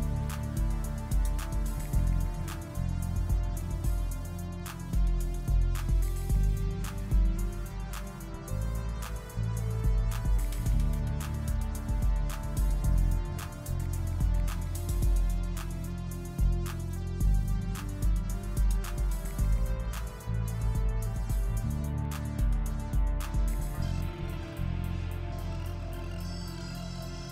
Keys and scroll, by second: 13.9 ctrl+z, 19.7 s, 24.9 1.